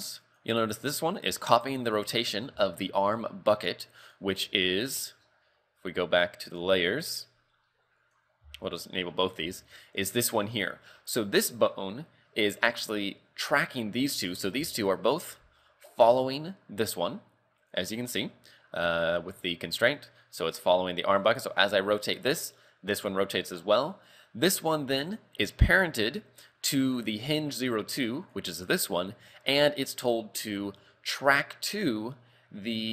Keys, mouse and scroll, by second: 0.3 right click, 2.2-2.6 scroll down 3, 2.6 shift+middle click, 3.3-3.8 scroll down 2, 4.0 click, 4.9-5.6 scroll up 9, 6.5 click, 8.0 click, 8.7 shift+click, 9.1 scroll up 4, 9.5 a, 9.6 right click, 10.0-10.5 scroll down 3, 10.9 r, 14.2 right click, 15.0 shift+right click, 16.0 click, 17.7 right click, 19.2 click, 21.2 right click, 21.7 r, 24.0 right click, 25.0 click, 26.0-26.3 scroll down 3, 28.2 right click, 28.9 right click, 31.2 click.